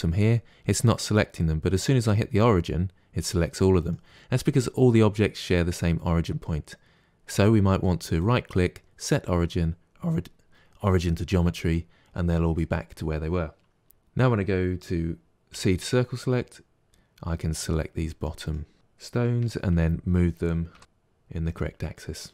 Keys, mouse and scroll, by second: 8.1-11.1 right drag, 13.9 alt+a, 15.4 c, 18.7 g, 19.4 g, 21.9 middle click.